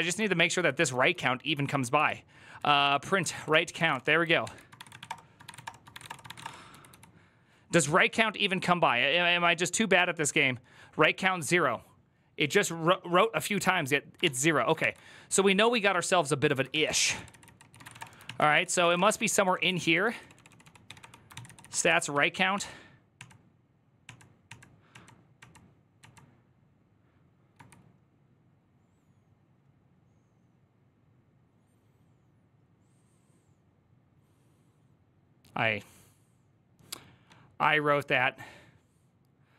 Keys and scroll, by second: 0.1-7.2 typing, 4.2 ctrl+h, 14.0 ctrl+h, 14.6 ctrl+t, 15.5 ctrl+n, 16.5 ctrl+s, 17.5 ctrl+c, 17.6 ctrl+:, 17.7-24.8 typing, 17.8 Return, 18.0 ctrl+n, 18.3 ctrl+c, 21.2 ctrl+c.